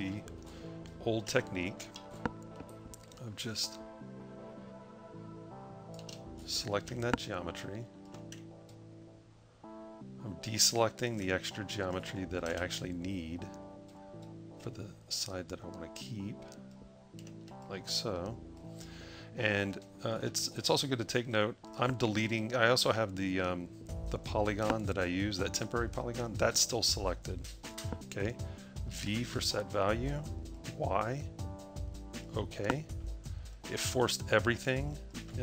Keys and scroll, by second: 28.8 v.